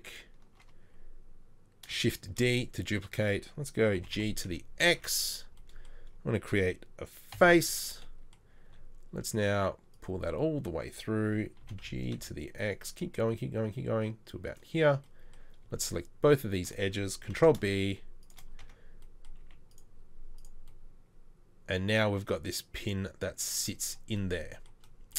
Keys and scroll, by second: 2.3 shift+d, 4.0 shift+d, 4.0 g, 7.4 f, 8.9 e, 11.6 g, 17.3 ctrl+b, 18.7 Tab, 19.4 z.